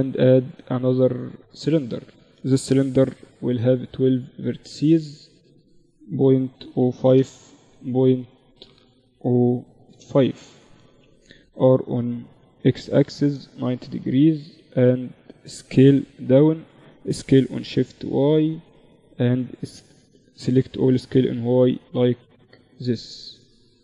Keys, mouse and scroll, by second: 2.0 F6, 10.2 r, 13.1 Tab, 13.3 a, 13.7 a, 13.9 z, 14.8 s, 16.1 s, 18.8 a, 19.0 a, 19.2 s, 21.4 z, 22.1 Tab, 23.2 ctrl+3.